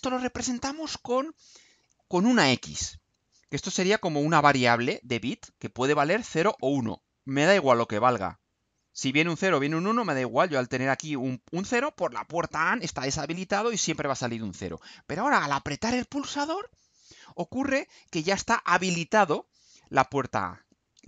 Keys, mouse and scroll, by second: 14.6-15.0 scroll down 2, 15.6-16.0 scroll down 2.